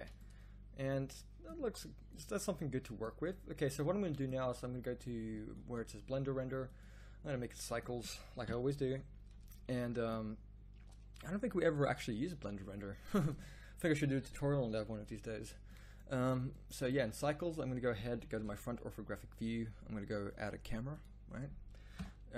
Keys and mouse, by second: 8.4 KP_1, 18.3 KP_1, 22.0 KP_0.